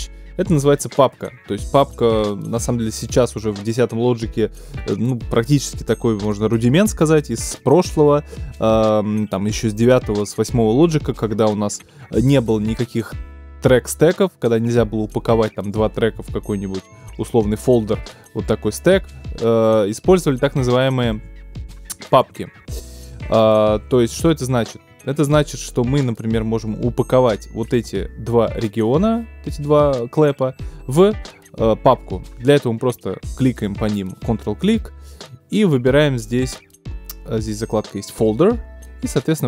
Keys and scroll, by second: 0.4 BackSpace, 1.4 alt+BackSpace, 16.9 shift+super+h, 20.0 super+z, 23.8 shift+super+z.